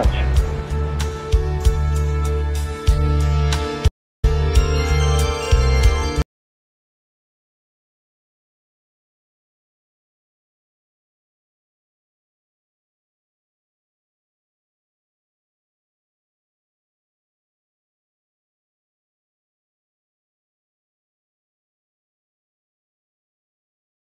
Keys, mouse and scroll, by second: 2.2 ctrl+s, 3.8 space, 6.1 space, 6.9 \, 9.9 click, 11.0 click, 12.0 click, 12.8 click, 14.5 click, 19.4-22.6 drag.